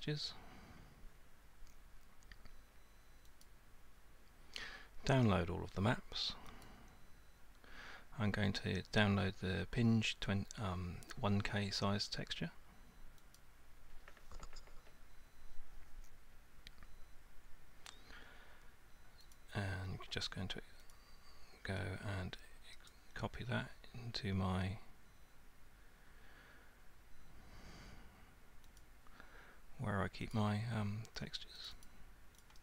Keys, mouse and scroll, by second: 3.4 click, 6.6 click, 13.4 click, 19.3 click, 20.9 click, 22.9 click, 28.8 click, 30.3 click, 31.7 click, 31.9 click, 32.4 click.